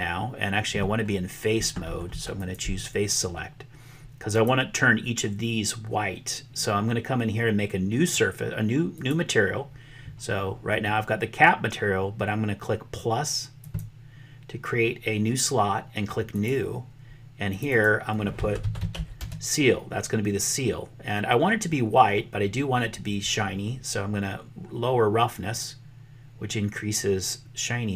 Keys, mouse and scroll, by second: 2.3 click, 4.3 click, 8.9 click, 13.6 click, 16.2 click, 17.5-19.9 drag, 25.6-27.9 drag.